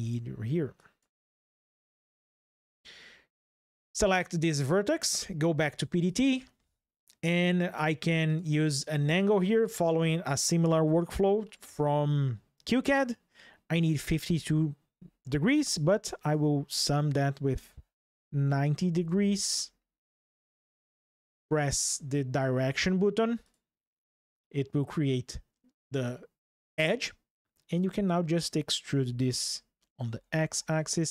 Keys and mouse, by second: 0.5 drag, 1.0 x, 2.2 click, 4.1 middle click, 5.8 click, 8.0-20.0 drag, 23.2 click, 27.5 drag, 28.6 e, 29.8 x.